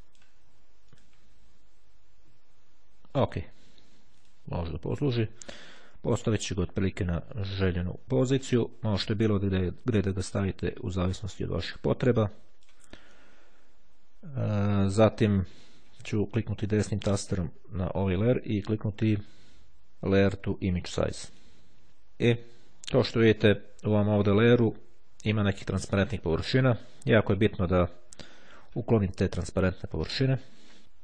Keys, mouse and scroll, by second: 1.1 click, 4.3 click, 5.4-13.3 drag, 16.3-17.7 right drag, 20.9 click.